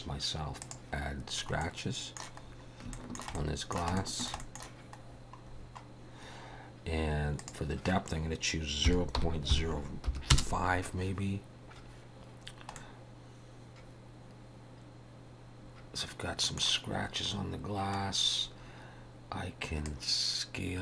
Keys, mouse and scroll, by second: 0.6 click, 1.6 middle click, 2.4 scroll up 2, 2.9 shift+middle click, 3.4 middle click, 4.0 shift+middle click, 4.4 middle click, 5.1-5.7 scroll down 8, 7.4 click, 12.5 scroll down 1, 12.8 middle click, 17.2 scroll down 4, 18.1 scroll down 2, 19.9 click.